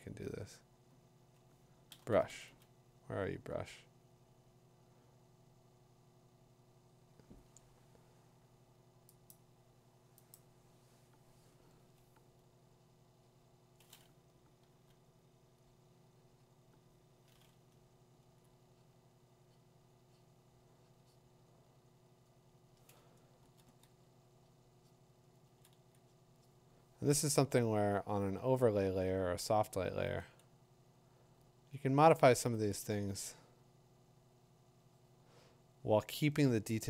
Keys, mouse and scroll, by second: 0.6 click, 1.9-2.3 typing, 2.1 click, 2.8 click, 3.7 click, 4.1 click, 5.9 click, 8.1 click, 9.3 click, 10.3 click, 14.7 b, 18.4 click, 19.0-21.5 drag, 23.4 [, 23.7 [, 25.5 [, 25.7 [, 27.5 ], 27.8 ], 28.2 [, 29.7 [, 30.0 [, 32.6 ], 32.9 ].